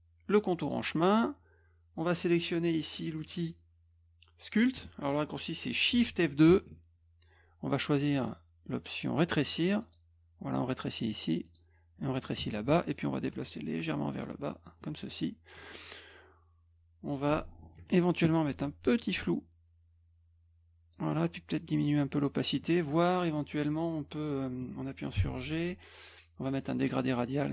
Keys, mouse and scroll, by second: 0.6 click, 3.2 click, 9.8 click, 11.5 click, 12.4 F1, 13.2 ctrl+click, 17.9 ctrl+shift+f, 19.0-20.9 drag, 21.9 click, 25.2 g, 26.6 click.